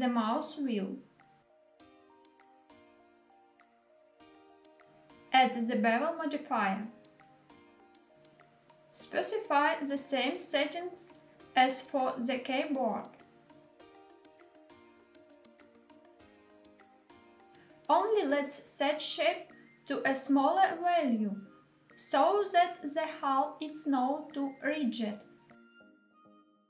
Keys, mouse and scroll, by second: 4.0 click, 5.0-7.3 drag, 8.2-10.9 drag, 11.5-13.0 drag, 14.5-16.8 drag, 18.8 click, 20.0-26.6 drag.